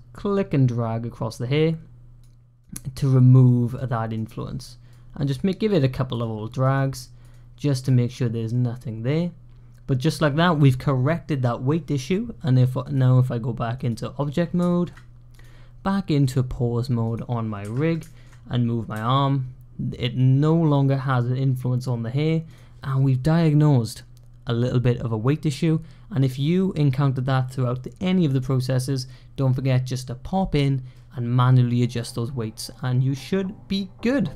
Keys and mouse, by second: 2.4-3.6 drag, 4.0 click, 5.1 click, 5.6 click, 6.1 click, 6.6 click, 7.1 click, 7.9-10.0 middle drag, 12.8-13.8 drag, 14.6 shift+click, 16.3-17.0 drag, 17.9 shift+click, 18.8 g.